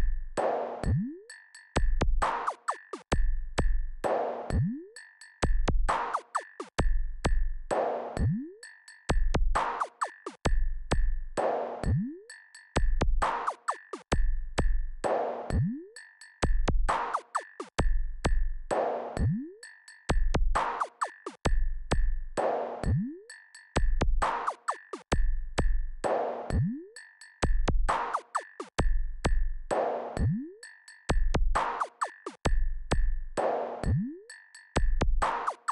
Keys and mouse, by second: 11.2 KP_4, 11.5-12.8 KP_4, 14.3 KP_6, 14.5 KP_6, 15.4 KP_6, 19.3-22.6 drag, 26.6 click, 29.9-35.6 drag.